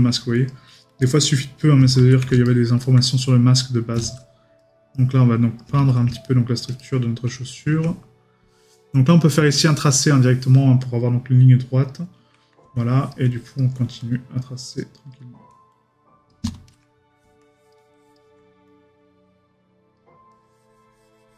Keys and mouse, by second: 2.4 right click, 6.1 right click.